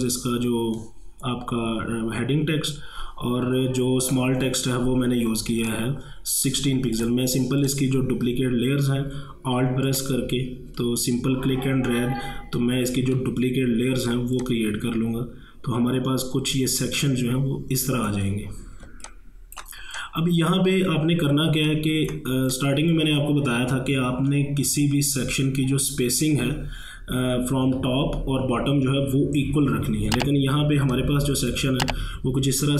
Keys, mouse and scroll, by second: 5.7 click, 7.7 shift+click, 9.9-14.4 alt+drag, 14.4-18.9 alt+drag, 18.9 ctrl+space, 19.1 ctrl+click, 19.4 ctrl+space, 20.0 click, 20.3 space, 21.5 ctrl+space, 21.7 ctrl+click, 22.0 ctrl+space, 22.1 ctrl+space, 22.5 click, 22.5 click, 22.9 space, 30.9-32.7 drag.